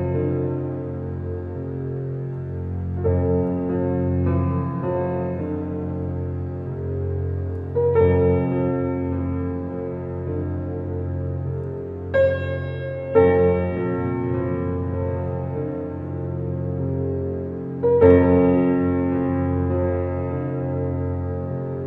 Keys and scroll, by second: 11.5 ctrl+t.